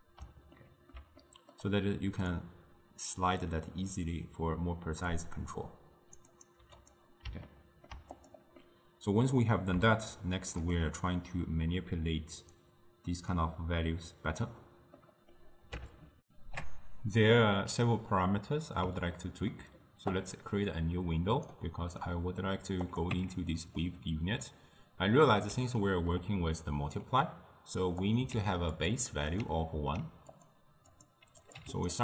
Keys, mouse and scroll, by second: 0.6-2.4 ctrl+middle drag, 2.4-5.6 drag, 6.4 click, 7.5-8.2 ctrl+middle drag, 8.2 click, 8.7-13.9 middle drag, 15.1-16.2 middle drag, 16.2 ctrl+alt+shift+w, 17.9-20.7 middle drag, 20.7-22.0 drag, 22.0-22.9 middle drag, 22.9 click, 23.2 Tab, 23.8-28.1 middle drag, 28.1 click, 28.4 shift+d, 29.2-30.4 middle drag, 30.4-31.9 drag.